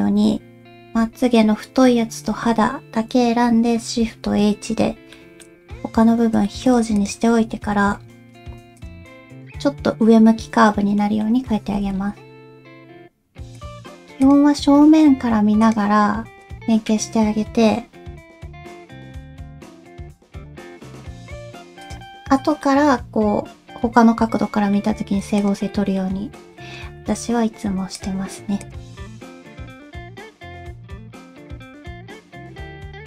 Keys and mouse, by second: 0.8 l, 2.1 l, 4.0 shift+h, 5.1 shift+middle click, 6.5 shift+middle click, 7.0 click, 7.6 g, 11.0 middle click, 11.6 g, 14.2 click, 16.4 click, 18.1 g, 19.5 click, 20.2 g, 22.6-24.7 middle drag, 25.7 middle click, 26.3 middle click, 26.8 g, 28.6 click, 28.9 g, 29.3 click, 30.5 click, 30.6 g, 31.1 middle click, 31.3 alt+z, 31.5 click, 31.7 alt+z, 31.8 middle click, 32.4 g.